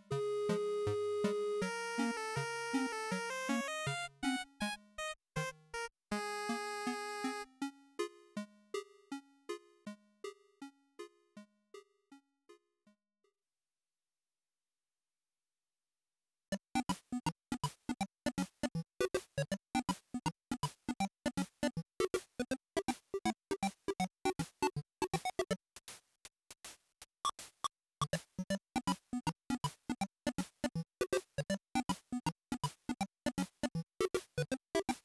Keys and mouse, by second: 10.9-15.9 drag, 24.0-26.6 drag, 27.3 click, 27.9-29.2 drag.